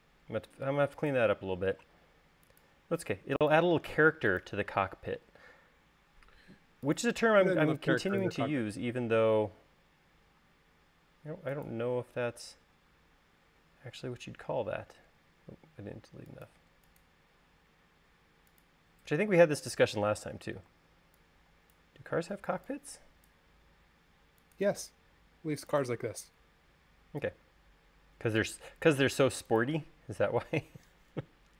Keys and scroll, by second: 10.0 e, 16.4 e, 21.6 super+z, 24.6 l, 27.8 l.